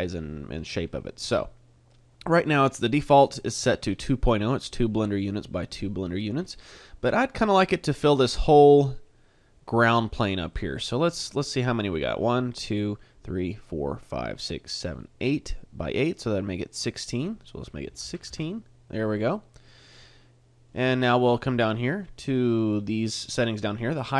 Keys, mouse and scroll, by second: 10.5 middle click, 17.1 click, 19.6 middle click, 19.9 middle click, 21.7 click.